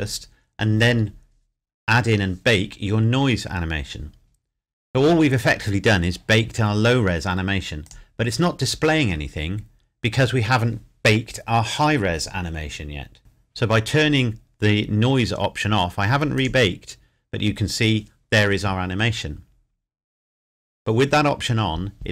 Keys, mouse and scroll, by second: 7.8 click, 13.2 click, 16.3 click.